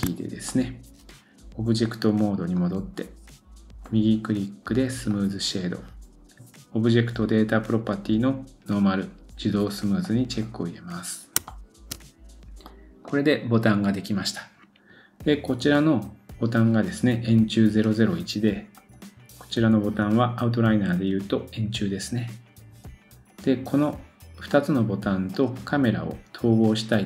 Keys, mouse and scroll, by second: 0.5 middle click, 3.8 right click, 10.0 click, 10.7-11.4 scroll down 1, 11.5-12.0 shift+middle drag, 12.2-12.7 scroll down 1, 12.7 middle click, 18.7 click, 24.5 click, 25.3 click.